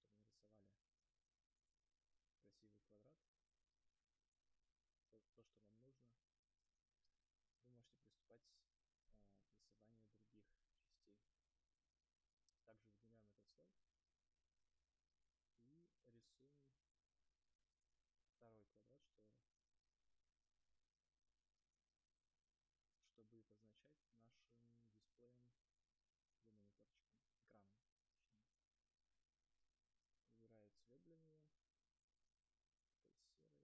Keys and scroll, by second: 0.5 space, 7.3 space.